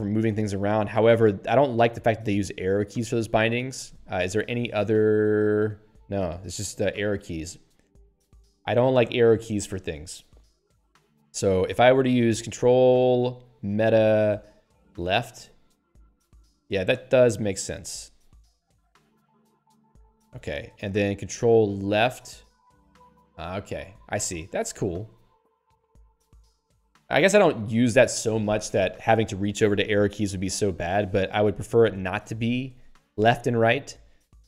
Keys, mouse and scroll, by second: 3.6 middle click, 4.9-5.8 typing, 7.0 ctrl+g, 8.8 click, 8.9 click, 14.9 ctrl+alt+Right, 16.3 ctrl+alt+Left, 16.7 ctrl+alt+Right, 17.5 ctrl+alt+Left, 18.5 ctrl+alt+Right, 19.2 ctrl+alt+Left, 22.0 ctrl+Right, 22.6 ctrl+Left, 23.2 ctrl+Right, 23.7 ctrl+Left, 24.3 ctrl+alt+Right, 24.9 ctrl+alt+Left, 25.6 ctrl+alt+Right, 26.2 ctrl+alt+Left.